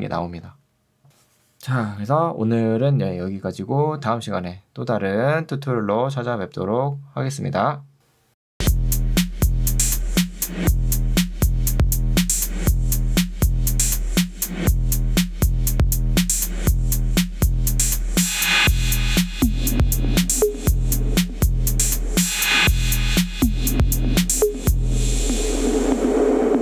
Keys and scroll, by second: 0.3 Escape.